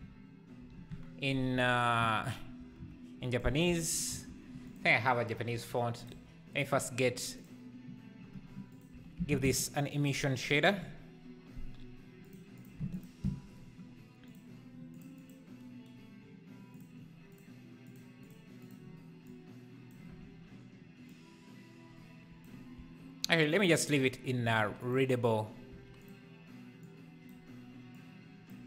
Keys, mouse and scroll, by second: 0.0-1.3 typing, 0.9 Tab, 3.5 r, 5.5 s, 6.1 g, 7.5-8.8 drag, 9.0 x, 9.3 shift+a, 12.9 ctrl+shift+click, 15.2 click, 17.3 click, 18.2 click, 19.2 click, 21.1 click, 22.8 s, 24.4 s, 25.7 s, 26.9 click, 28.1 click.